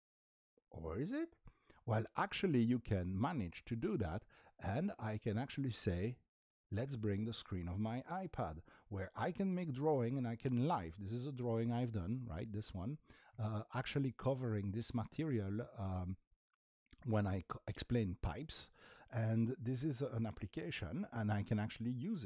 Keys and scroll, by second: 4.6 typing.